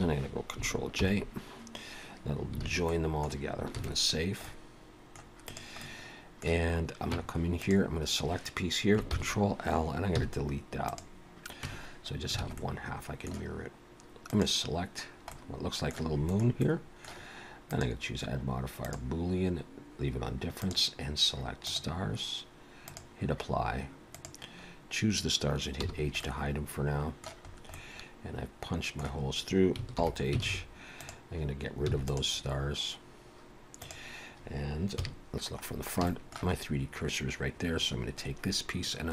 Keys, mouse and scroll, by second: 0.0 shift+click, 0.9 ctrl+j, 2.7 alt+a, 2.9 middle click, 3.8 ctrl+s, 4.2 scroll down 3, 4.5 middle click, 5.5 click, 5.8 middle click, 7.2 Tab, 7.6 click, 9.1 ctrl+l, 10.2 x, 11.7 Tab, 12.5 alt+a, 12.6 middle click, 14.3 click, 15.3 middle click, 16.7 middle click, 17.7 click, 20.6 click, 24.2 click, 25.7 h, 26.2 middle click, 27.5-27.9 scroll up 2, 27.8 middle click, 29.2-29.8 scroll down 1, 29.8 scroll down 1, 30.0 alt+h, 30.4 alt+a, 30.5 alt+s, 30.9 click, 31.9 x, 33.8 click, 35.0 KP_1, 35.7 scroll down 3, 36.1 shift+middle click, 36.6 scroll up 1.